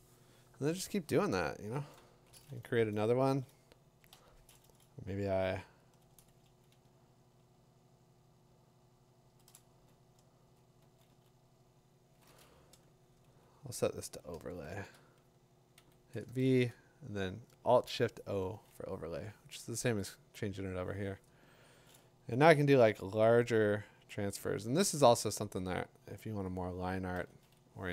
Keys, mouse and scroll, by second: 2.1 ctrl+shift+n, 6.0-9.1 drag, 9.3-12.4 drag, 10.5 7, 11.1 [, 13.3 [, 14.5 alt+shift+o, 16.4 shift+o, 20.4 click, 21.6 click, 22.5 ], 23.2 click, 23.6-27.2 typing, 26.5 click.